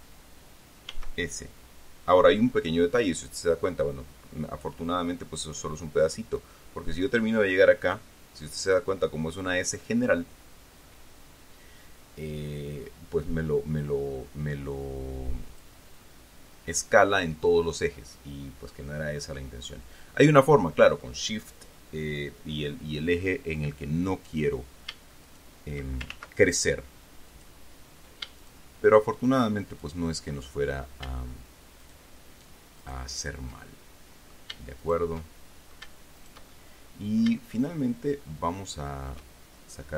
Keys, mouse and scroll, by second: 1.2 s, 15.8 click, 16.3-19.9 middle drag, 20.0 scroll up 1, 24.6 right click, 25.6 shift+right click, 27.6 click, 28.8 shift+right click, 30.0 shift+right click, 30.7 shift+middle click, 32.2 shift+right click, 33.1 shift+right click, 33.9 shift+middle click, 35.2 shift+right click, 35.5 shift+middle click, 36.0 right click, 36.1 shift+middle click, 36.5 shift+right click, 36.8-38.7 shift+middle drag, 38.7 shift+click.